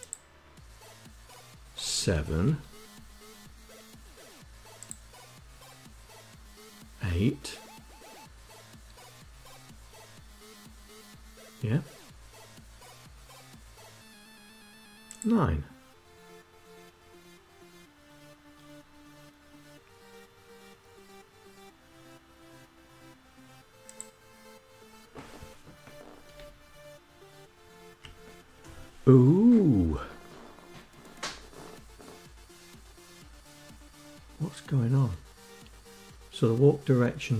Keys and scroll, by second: 24.2 Down.